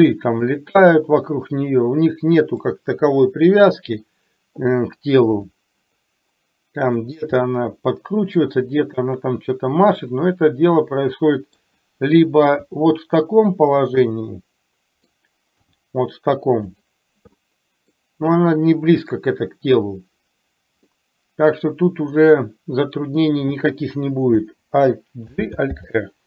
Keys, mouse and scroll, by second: 0.9-2.7 middle drag, 3.8 middle click, 5.4 r, 7.4-11.7 middle drag, 12.7 g, 14.0-15.2 middle drag, 15.7 g, 17.4 middle click, 20.9-23.3 middle drag, 25.3 alt+g, 25.8 alt+r.